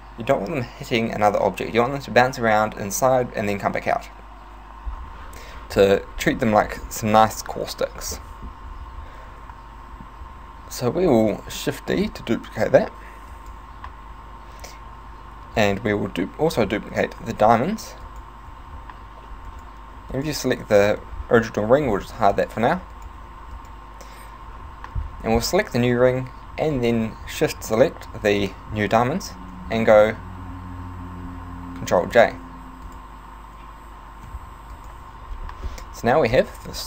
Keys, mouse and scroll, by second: 6.4 middle click, 8.2 shift+middle click, 12.0 shift+d, 13.5 right click, 15.7 right click, 17.2 shift+d, 18.3 right click, 18.5 z, 19.5 right click, 20.2 right click, 22.1 h, 22.4 right click, 23.0 shift+right click, 23.6 right click, 26.8 shift+right click, 32.2 ctrl+j, 32.9 right click, 34.4 h, 34.8 right click, 35.9 z, 36.4 middle click.